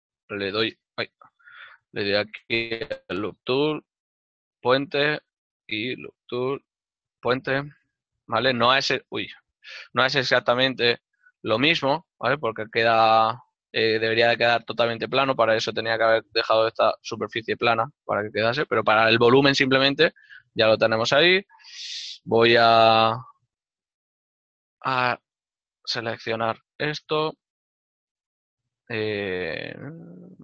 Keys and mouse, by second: 0.1 shift+right click, 0.7 shift+right click, 2.0 w, 4.6 click, 5.7 right click, 8.6 e, 9.2 right click, 10.1 w, 19.4 shift+middle click, 23.7 ctrl+Tab, 24.7 ctrl+KP_Add.